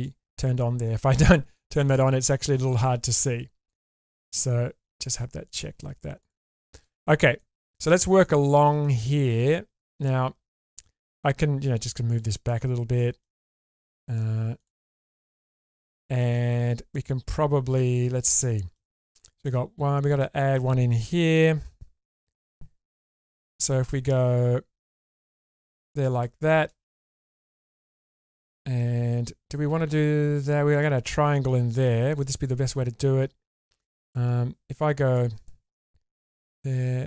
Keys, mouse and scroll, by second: 1.2-2.8 middle drag, 5.7 click, 6.2 click, 6.6 middle click, 7.0-7.4 scroll up 2, 7.4 middle click, 7.8 shift+middle click, 8.2 middle click, 9.4 click, 10.6 middle click, 11.6 click, 12.7 scroll down 1, 13.0 middle click, 14.0-14.5 scroll down 1, 15.0 click, 16.0 shift+middle click, 16.4-17.1 scroll up 2, 18.0 middle click, 20.2 middle click, 23.4 k, 27.2 scroll down 1, 27.5 middle click, 28.5-29.9 scroll up 3, 34.1 ctrl+z, 35.0 click, 36.2 4.